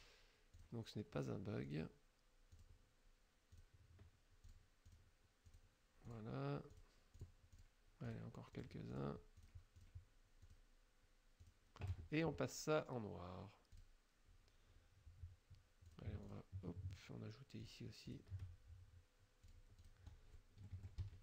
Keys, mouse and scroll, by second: 0.6 shift+click, 1.7 shift+click, 2.6 shift+click, 3.6 shift+click, 4.5 shift+click, 5.0 shift+click, 5.5 shift+click, 6.1 shift+click, 6.8 shift+click, 7.2 shift+click, 7.6 shift+click, 8.1 shift+click, 8.6 shift+click, 9.0 shift+click, 9.5 shift+click, 9.8 shift+click, 10.5 shift+click, 11.5 shift+click, 13.8 click, 15.9 click, 16.3 shift+click, 17.7 shift+click, 18.1 shift+click, 19.5 click, 19.9 click, 20.7 F1, 21.1 KP_Subtract.